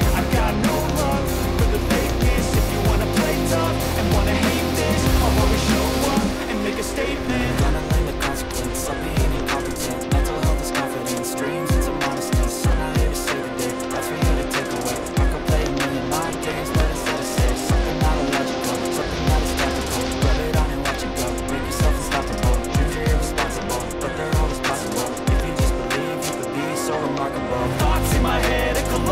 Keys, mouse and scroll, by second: 1.0 click, 2.8 click, 5.0 click, 5.7 click, 7.8 click, 8.9 click, 11.5 3, 11.8 Return, 14.3 click, 16.5 click, 17.5 click, 18.9-20.0 drag, 19.6-20.5 typing, 24.8 click, 27.2 click.